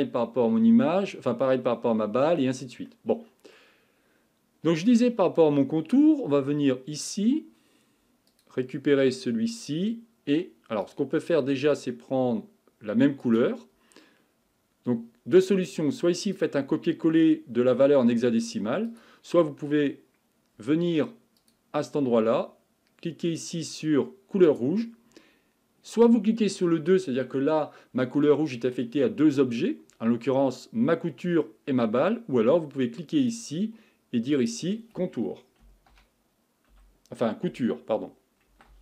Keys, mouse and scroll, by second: 2.9-8.3 middle drag, 8.3 click, 10.8 click, 13.2 click, 16.2 click, 18.9 click, 21.4 click, 23.2-26.3 drag, 33.3-37.5 drag.